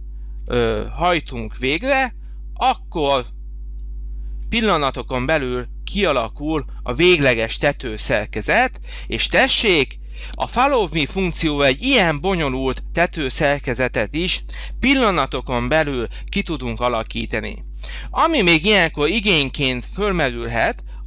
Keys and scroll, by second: 15.0 h, 20.4 space.